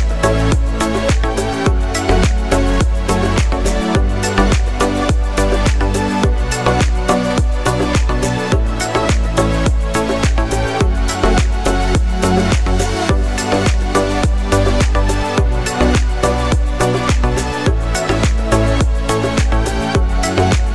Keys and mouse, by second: 0.6-4.0 drag, 1.7 s, 2.8 s, 4.0-7.3 middle drag, 7.3-9.2 shift+drag, 7.4 shift+d, 8.5 s, 9.2-11.9 middle drag, 9.3 s, 11.9-12.9 drag, 12.9-14.1 middle drag, 14.1-20.7 drag, 19.5 shift+d.